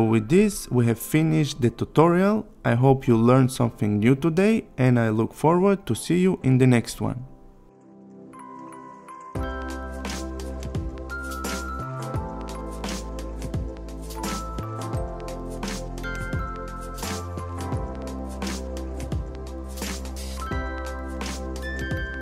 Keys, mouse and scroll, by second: 14.5 click, 16.3 Return, 16.6 click, 19.1 click, 21.9 click.